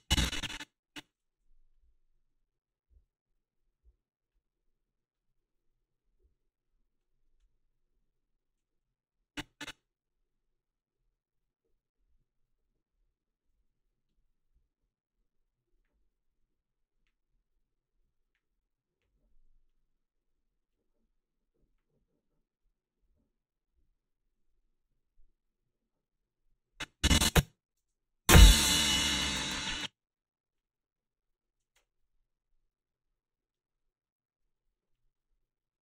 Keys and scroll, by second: 27.8 space, 29.5 space.